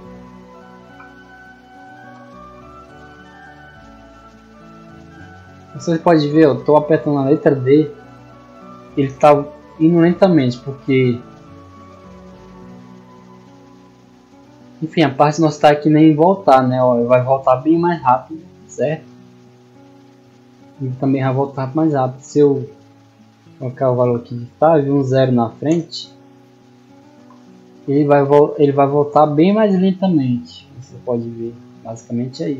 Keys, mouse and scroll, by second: 2.6 d, 4.7 d, 12.8 d, 18.9 a, 27.9 d.